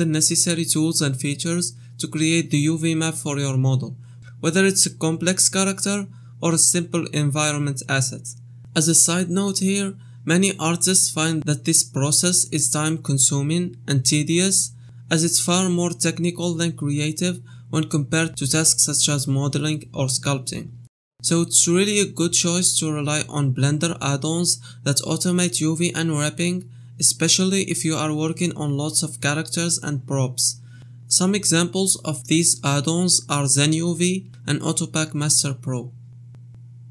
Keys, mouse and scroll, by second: 1.4 u, 2.4 middle click, 4.5 click, 5.0 middle click, 7.0 a, 7.4 u, 13.8 right click, 15.2 right click, 16.3 right click, 16.7 shift+click, 18.4 ctrl+z, 18.7 ctrl+z, 19.2 middle click, 19.6 KP_1, 19.6 middle click, 20.0 middle click, 20.3 middle click, 20.6 click, 20.8 shift+middle click, 20.9 middle click, 21.5 shift+middle click, 21.6 middle click, 22.8 right click, 23.1 shift+click, 25.1 click, 25.9 middle click, 26.5 middle click, 26.9 ctrl+click, 28.4 shift+middle click, 28.5 middle click, 31.1 click, 31.4 right click, 33.9 middle click, 34.5 KP_1, 34.7 middle click.